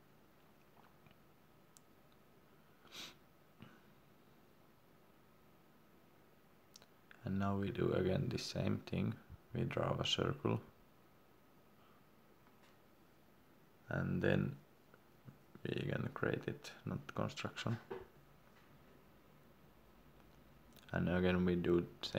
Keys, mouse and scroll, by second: 1.2 scroll up 1, 1.3-1.6 scroll down 1, 1.8 click, 2.6 Escape, 6.0 click, 9.7 scroll down 1, 12.2 click, 15.2 Escape, 17.6 click.